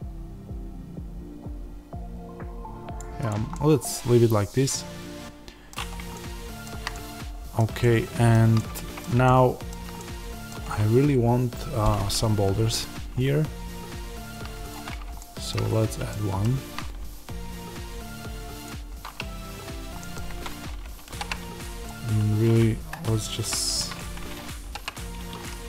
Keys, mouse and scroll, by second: 3.4-14.5 middle drag, 5.7-6.1 scroll down 2, 14.5 shift+right click, 14.9 scroll down 1, 15.1-16.4 shift+middle drag, 15.6-16.0 scroll up 2, 16.4 shift+a, 20.2 Tab, 21.0 ctrl+r, 22.8 Escape, 24.0 Escape, 25.1 Escape.